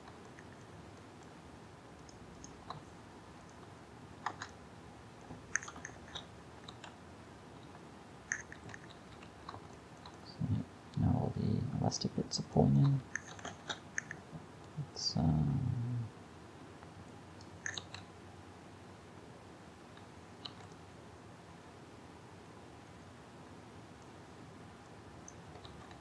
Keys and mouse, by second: 0.5 click, 1.1 click, 3.5 click, 3.5 right click, 4.1 a, 4.4 Tab, 5.9 shift+Left, 6.7 alt+a, 8.7 alt+a, 9.3 a, 13.5 shift+Left, 17.8 alt+a, 20.6 alt+a, 25.7 alt+a.